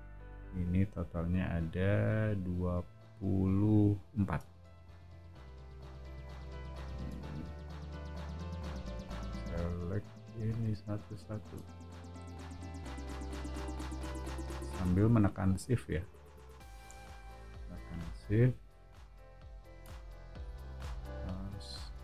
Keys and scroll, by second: 4.6 o, 6.7 space, 11.9 o, 14.0 space, 20.2 o, 21.9 space.